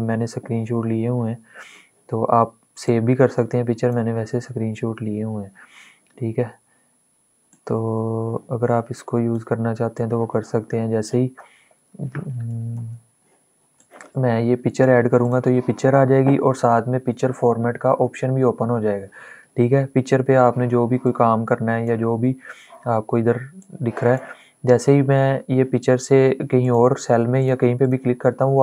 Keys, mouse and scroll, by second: 2.5-6.4 drag, 7.2-12.4 drag, 12.4 ctrl+z, 13.4-14.9 ctrl+drag, 20.7-26.3 drag.